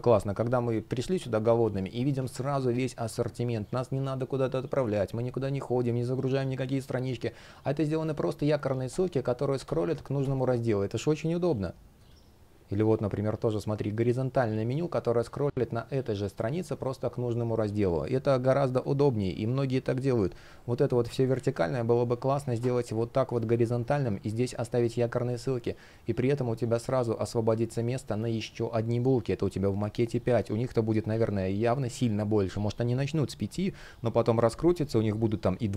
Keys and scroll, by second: 21.0 super+z.